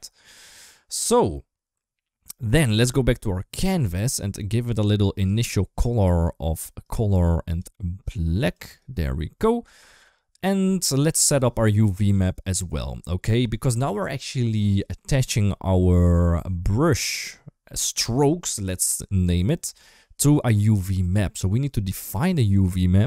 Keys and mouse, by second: 4.9 click, 5.8 click, 7.3 click, 22.1-23.0 drag.